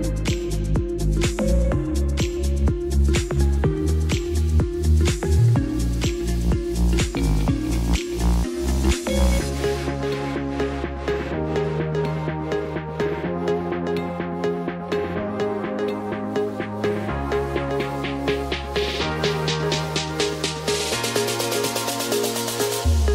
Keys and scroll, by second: 0.3 z, 2.0 space, 18.9 ctrl+t.